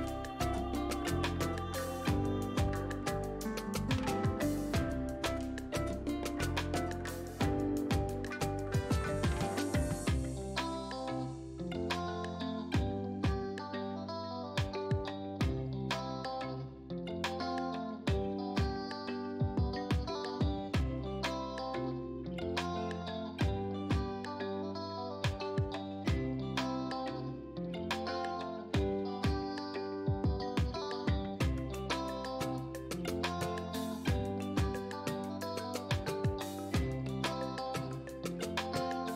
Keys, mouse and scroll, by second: 0.2 scroll down 1, 1.4-7.0 drag, 7.6 space, 9.1-10.8 drag, 10.8 right click, 11.6 click, 14.8 click, 17.1 click, 21.7-25.2 drag, 25.1 right click, 25.2 right click, 27.0 click, 29.6 ctrl+a, 31.3-37.1 drag, 38.4 click.